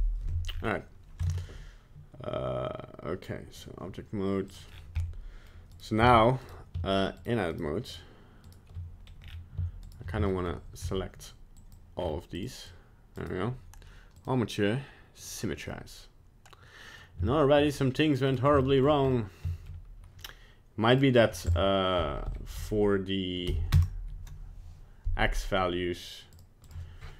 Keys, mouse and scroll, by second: 0.5-1.2 scroll up 5, 1.2 ctrl+Tab, 4.5 click, 4.7-5.0 scroll down 4, 5.0 middle click, 5.7 right click, 6.1 Tab, 6.4 right click, 7.2 shift+right click, 7.5 shift+right click, 7.8 right click, 8.4 shift+right click, 9.1 scroll up 1, 9.2 scroll down 4, 9.8 shift+right click, 10.3 shift+middle click, 10.8 c, 14.1 click, 15.7 middle click, 17.3 shift+middle click, 17.7 middle click, 18.3 right click, 18.6 shift+middle click, 19.0 scroll up 3, 19.5 shift+middle click, 20.9 click, 26.3 click.